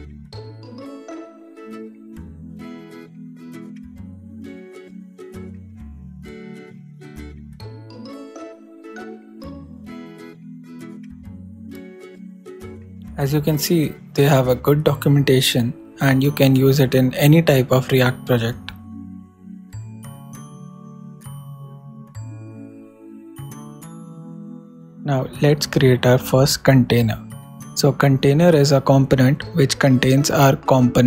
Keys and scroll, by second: 2.6 super+Return, 4.7 super+Down, 4.8 super+Right, 5.2 shift+super+Return, 5.3-6.2 typing, 7.1 alt+Return, 7.6 alt+super+Return, 8.5 alt+shift+super+Left, 8.6 shift+super+Right, 8.9 shift+super+BackSpace, 9.2 shift+,, 9.7 shift+/, 10.9 super+Return, 11.2 super+s, 12.1 super+Tab, 21.7 shift+/, 22.2 shift+a, 23.5-24.3 typing.